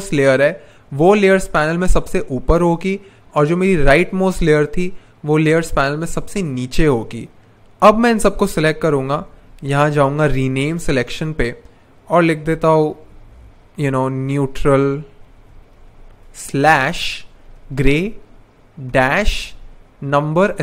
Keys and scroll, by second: 9.2 super+/, 9.3-10.4 typing, 10.6 Return, 12.8-13.7 typing, 15.0-18.9 typing.